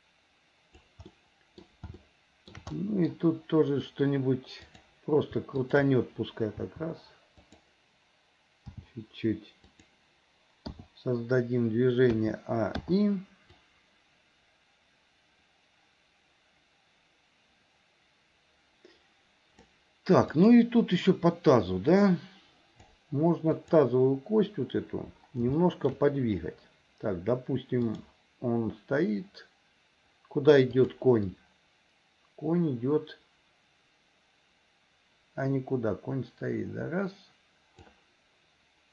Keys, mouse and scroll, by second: 1.2 middle click, 2.1 shift+middle click, 2.7 middle click, 4.7 click, 5.7 shift+click, 6.7 r, 8.8 g, 10.8 i, 12.2 a, 12.9 i, 13.7-19.8 drag, 20.4 click, 22.0-23.0 drag, 23.5 click, 25.6 shift+middle click, 27.9 click, 30.8 click, 31.4-38.0 drag.